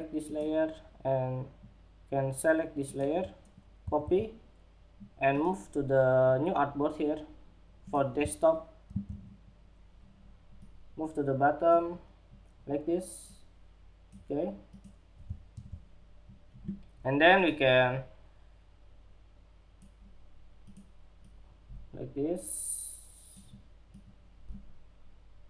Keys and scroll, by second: 3.3 super+c, 8.2 super+v, 14.9 super+=.